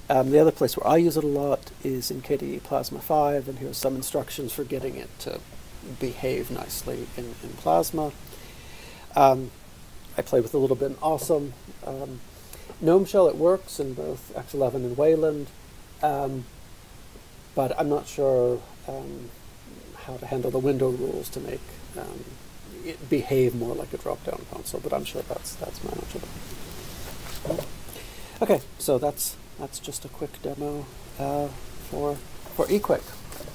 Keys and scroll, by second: 28.1 F12, 29.1 ctrl+}, 29.5 ctrl+}, 29.9 ctrl+}, 30.1 ctrl+}, 30.8 ctrl+}, 30.8 ctrl+alt+{, 31.0 ctrl+alt+{, 31.2 ctrl+alt+{, 31.3 ctrl+alt+{.